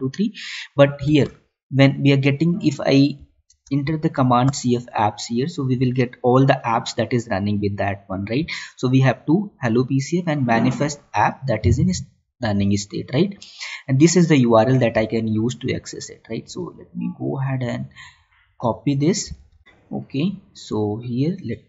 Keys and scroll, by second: 1.7 Tab, 19.6 alt+Tab, 21.1 ctrl+v.